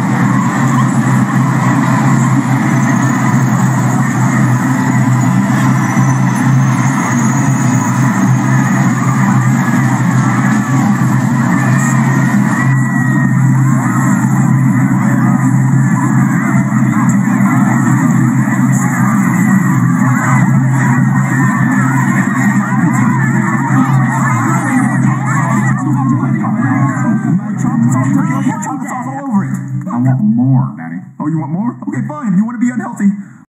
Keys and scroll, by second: 12.7 space, 20.4 space, 28.5 space.